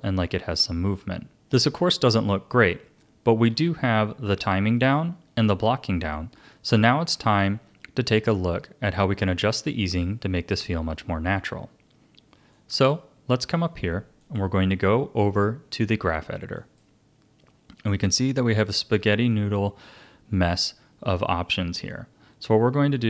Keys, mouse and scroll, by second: 1.3-3.9 drag, 12.5-17.3 drag.